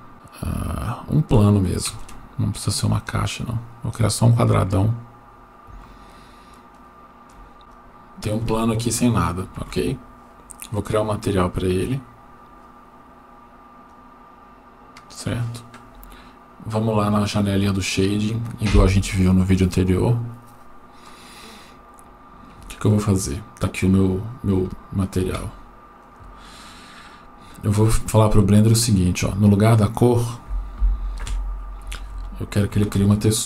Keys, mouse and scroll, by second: 1.9 shift+a, 5.3 scroll up 4, 6.1-7.0 shift+middle drag, 7.6 click, 7.6 shift+a, 10.9-13.8 drag, 21.7-22.6 scroll up 5, 22.8-23.9 shift+middle drag, 24.1-24.5 scroll up 2, 24.7 shift+middle click, 26.0 click, 27.1 scroll up 1, 28.0 shift+middle click, 29.8 click, 31.9 Escape, 32.9 shift+a.